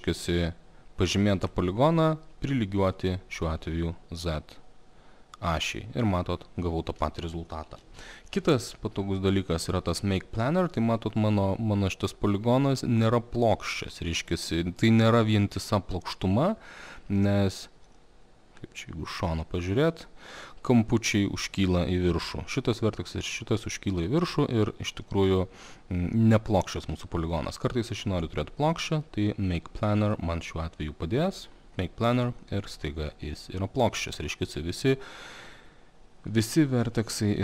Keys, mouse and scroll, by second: 1.7 click, 4.5 click, 6.3 alt+middle click, 6.4 alt+middle click, 6.8 alt+middle click, 7.8 ctrl+z, 10.5 click, 13.8 alt+middle click, 17.2 alt+middle click, 19.6 alt+middle click, 25.0 alt+middle click, 27.4 alt+middle click, 30.1 click, 31.9 click, 34.1 alt+middle click.